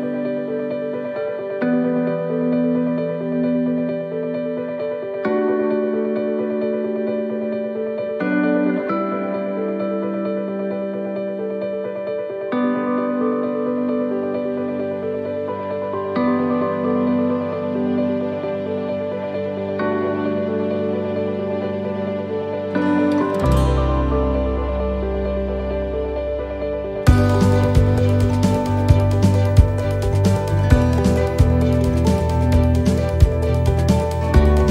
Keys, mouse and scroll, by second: 1.3 click, 3.3 click, 6.7 click, 8.1 middle click, 11.9 right click, 12.4 l, 13.6 click, 15.7 middle click, 16.7 click, 18.8 click, 21.7 click, 21.7 middle click, 22.2-22.9 scroll down 3, 22.5 middle click, 23.1 middle click, 23.9 scroll up 1, 24.3 shift+middle click, 24.7 middle click, 25.0 scroll down 2, 26.1 click, 28.1 shift+middle click, 28.4-28.8 scroll down 1, 29.0 shift+middle click, 29.4-29.8 scroll down 1, 29.8 middle click, 30.5 middle click, 30.7 shift+middle click, 30.7 scroll down 1, 30.9 middle click, 31.1 shift+middle click, 31.4 scroll up 1, 31.6-32.0 scroll down 1, 32.5 right click, 32.8 shift+middle click, 33.9 click.